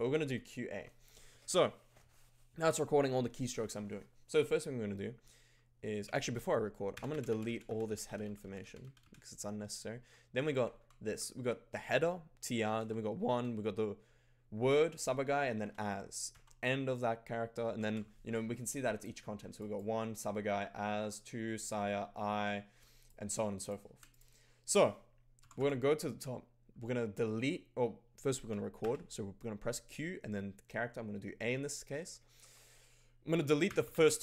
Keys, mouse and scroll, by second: 0.0-0.6 typing, 6.1-18.6 typing, 9.9 Down, 10.3 Up, 10.5 Up, 10.7 Down, 11.0 Up, 12.7 Down, 13.2 Down, 15.6 Down, 16.3 Down, 17.8-18.8 Down, 18.6 alt+click, 19.5 click, 20.0 click, 23.0 alt+click, 24.0 click, 25.4 g, 25.5 g, 28.4 q, 28.8 a, 33.7 d, 33.8 d, 33.9 d.